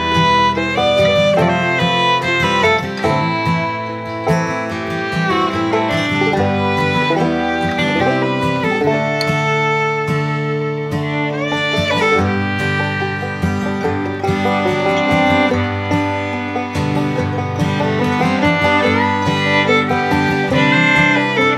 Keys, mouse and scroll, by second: 1.0 Down, 4.2 click, 5.8 click, 6.1 Right, 9.2 click, 14.9 click, 17.7-21.5 drag.